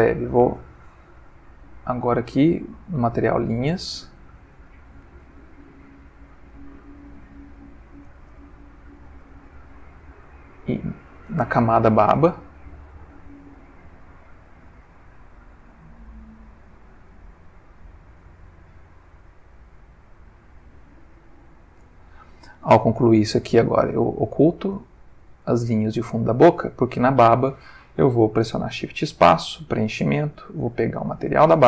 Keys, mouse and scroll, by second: 0.4 click, 1.7-3.4 drag, 3.5 ctrl+z, 5.2 click, 5.9 click, 8.0 click, 10.6 click, 11.9-21.9 drag, 23.9 click, 25.8 click, 28.4 shift+space, 29.4 click, 30.6 click, 31.2 click.